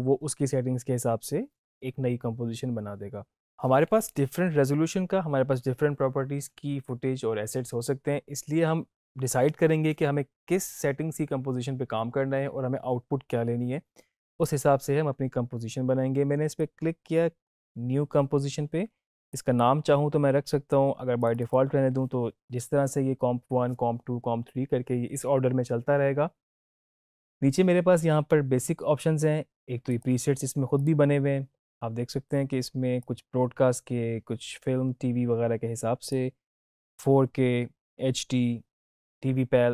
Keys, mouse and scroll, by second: 14.2 click, 16.5-17.5 drag, 29.8-36.1 drag.